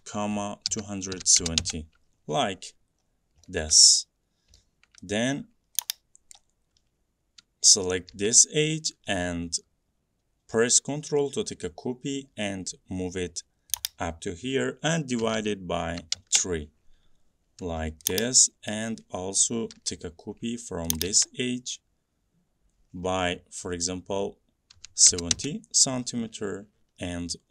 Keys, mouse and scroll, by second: 0.0-2.0 typing, 2.7-3.5 scroll, 3.9 middle click, 5.0 middle click, 6.4-13.8 drag, 8.2 m, 13.9-17.7 drag, 15.3-16.2 typing, 17.7 m, 24.8-25.4 typing, 26.8 Escape.